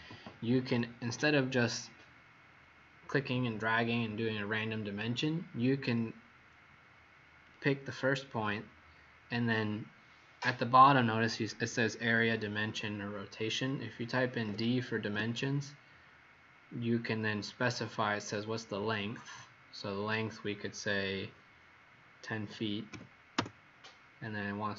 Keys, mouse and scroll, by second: 7.4 click, 14.4 typing, 15.0 Return, 22.3 KP_1, 22.4 KP_0, 22.8 ', 23.3 Return.